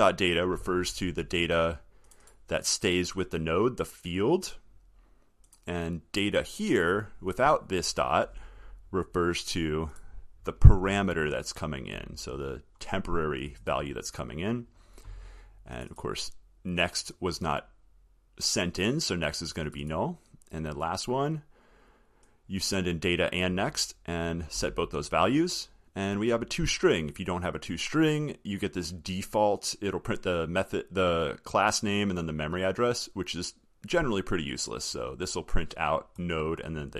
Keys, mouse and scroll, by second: 11.4 alt+middle click, 11.5 alt+scroll, 11.6 alt+scroll, 11.9 alt+scroll, 14.2 scroll up 1.